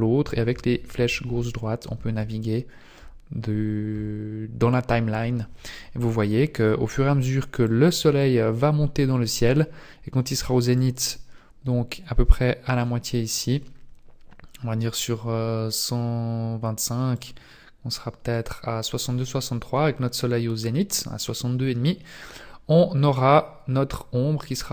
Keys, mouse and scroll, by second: 0.3 Right, 0.5 Right, 0.7 Right, 0.9 Right, 1.1 Right, 1.3 Right, 1.8 Right, 2.2-3.0 Right, 3.9-4.5 Right, 4.6-5.1 Right, 7.6 click, 10.8 click, 17.1 click.